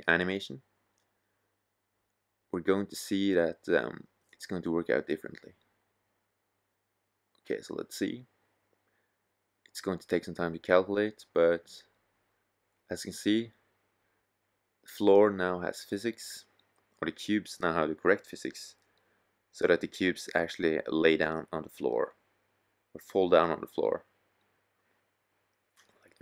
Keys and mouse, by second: 9.3 z, 13.9 middle click, 14.6 middle click, 14.8 middle click, 16.6 middle click, 18.8 middle click.